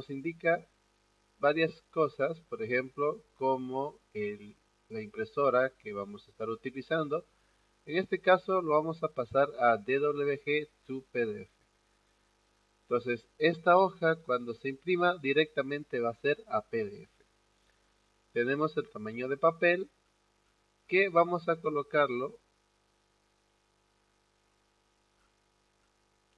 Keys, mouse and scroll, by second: 7.2-7.6 scroll up 1, 7.6 click, 8.8 scroll down 1, 8.9 middle click, 11.8 click, 18.2 click, 19.6-21.9 scroll up 4, 22.2-23.2 scroll down 2, 23.3-25.0 scroll down 2, 25.8-26.2 scroll down 2.